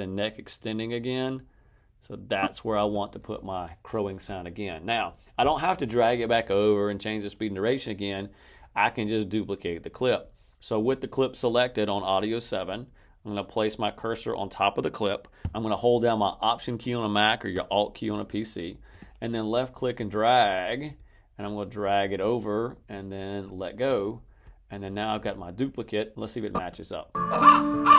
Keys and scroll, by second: 27.1 space.